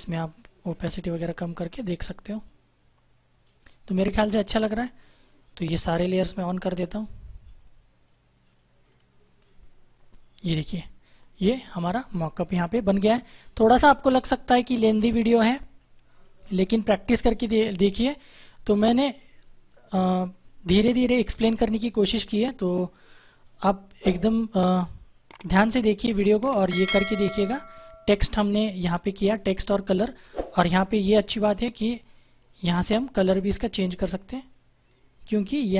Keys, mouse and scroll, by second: 4.1-4.4 scroll down 1, 5.9 click, 8.7-9.7 scroll up 1, 12.7 ctrl+=, 14.2 click, 32.0 click.